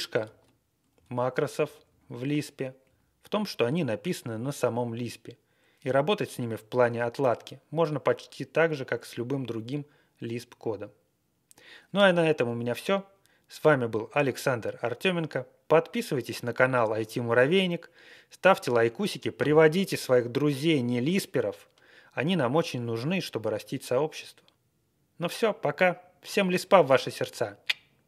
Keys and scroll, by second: 0.2 ctrl+a, 0.9 Left, 1.1 Left, 1.2 Left, 1.2 Left, 1.6 Right, 2.8 Right, 3.9 Right.